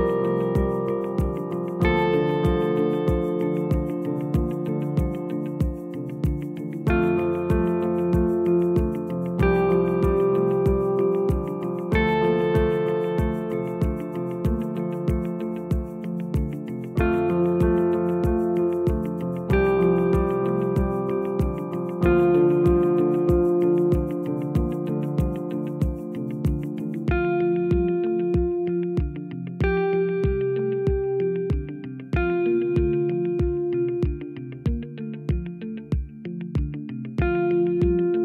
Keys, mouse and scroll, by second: 4.5 click, 4.9 g, 7.5 click, 8.6 g, 10.7 click, 15.5-18.5 drag, 19.4-22.4 drag, 24.3 Tab, 25.5 g, 29.8 Tab, 30.1-30.5 scroll down 1, 30.5 click, 31.2-32.5 scroll down 1, 32.5 scroll up 2, 32.8 click, 33.5 Tab, 34.0-35.7 scroll up 2, 35.7 click.